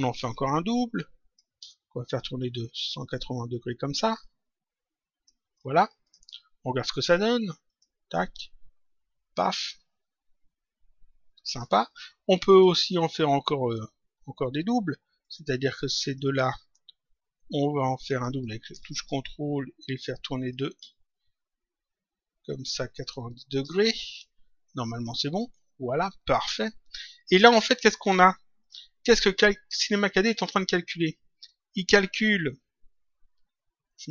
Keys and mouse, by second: 0.2 ctrl+click, 2.9 click, 4.1 shift+click, 6.0 click, 7.7 click, 11.5 click, 13.6 click, 15.2 click, 15.9 ctrl+click, 19.0 ctrl+shift+click, 20.5 ctrl+click, 24.0 click, 28.5 click, 31.4 click.